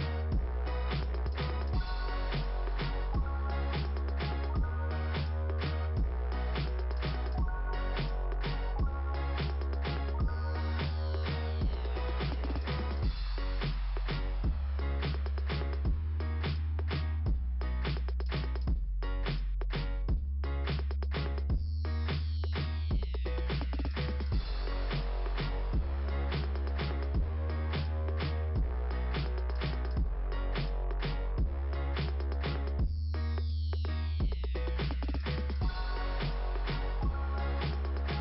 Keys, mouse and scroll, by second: 1.1 click, 3.2 click, 3.5 click, 7.7 click, 8.6 click, 16.3 click, 16.5 click, 16.8 click, 17.1 click, 17.5 click, 17.8 click, 18.6 right click, 18.7 click, 18.9 right click, 20.0 click, 21.3 click, 23.3 click, 25.9 click, 26.6 click, 27.3 click, 27.8 click, 28.4 click, 29.3 right click, 30.1 click, 31.1-31.9 scroll down 1, 31.9 scroll down 1, 36.3 click.